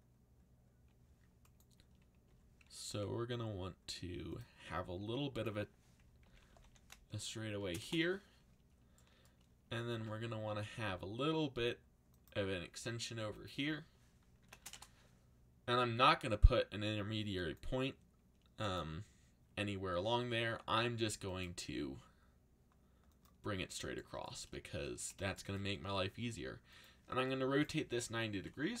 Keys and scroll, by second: 2.2 e, 2.8 z, 6.0-7.6 typing, 7.8 Return, 9.6 e, 9.9 y, 10.8 x, 14.1-15.1 typing, 26.2 r, 28.1-28.8 typing.